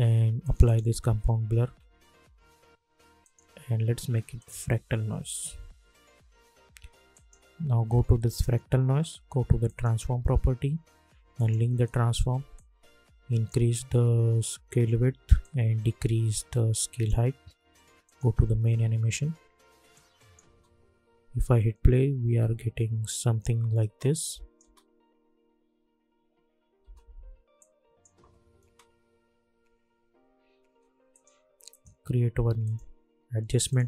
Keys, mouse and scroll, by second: 0.4 click, 3.2 click, 7.2-15.4 drag, 15.7-17.2 drag, 20.2 click, 20.4 space, 23.8 space, 24.2 click, 24.6 space, 26.8 space, 27.5 click, 28.6 space, 30.6 space, 31.1 click, 31.7 right click, 32.6 click.